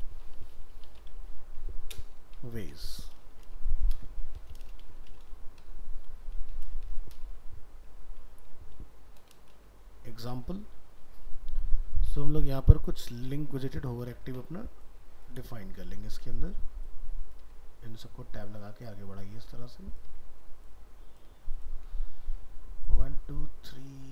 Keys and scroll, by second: 14.0 ctrl+c, 15.4 ctrl+v.